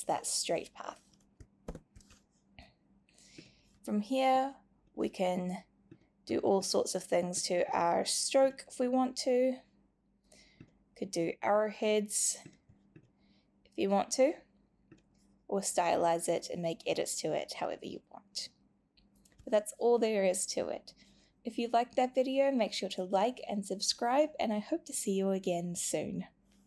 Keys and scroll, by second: 1.6 super+y.